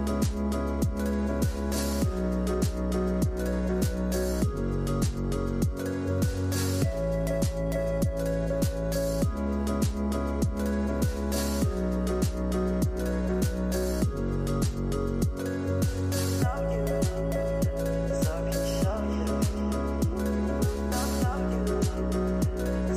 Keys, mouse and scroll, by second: 5.7-8.7 drag, 9.2-12.3 drag, 17.9 click, 19.8-21.6 drag, 21.6 scroll up 6.